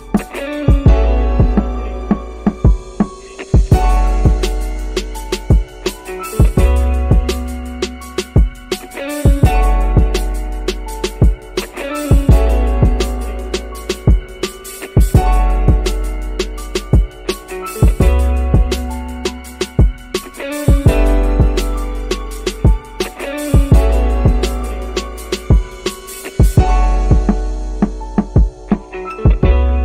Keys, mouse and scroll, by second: 4.7 click, 6.7 space, 8.3 space, 9.6 space, 11.8 space, 12.2-13.3 scroll down 8, 12.8 middle click, 14.6-17.2 drag, 16.0 0, 17.7 space.